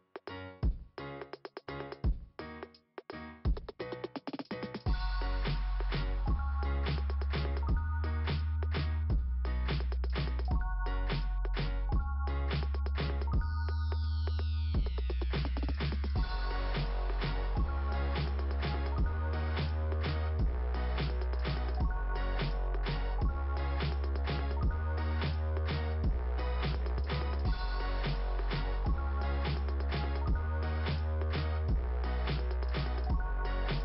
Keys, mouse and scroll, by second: 0.8 click, 0.9 click, 1.8 click, 2.3 right click, 4.5 click, 8.2 right click, 8.4 right click, 10.0 click, 10.1 click, 12.2 click, 12.3 click, 13.4 click, 13.5 click, 14.5 click, 14.7 click, 14.7 click, 16.3 click, 16.7 click, 18.7 click, 20.6 click, 20.9 click, 23.3 click, 23.4 click, 27.5 click, 28.2 click, 28.3 click, 28.4 click, 28.5 click, 29.0 click, 29.2 click, 30.8 click, 31.1 click, 31.4 click, 33.3 click, 33.7 click.